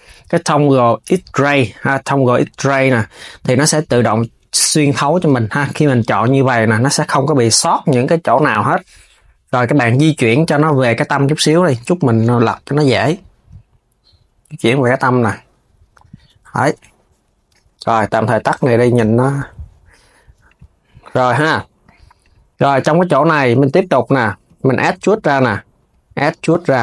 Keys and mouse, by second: 2.1-4.2 drag, 4.2 KP_1, 5.3 click, 8.4 KP_3, 10.2 click, 15.6 KP_3, 16.0 Tab, 17.2 s, 17.9-19.6 drag, 19.8 s, 20.2 click, 20.7 Tab, 21.9 click, 23.3 click, 24.4 shift+click, 24.7 KP_3, 25.5 e.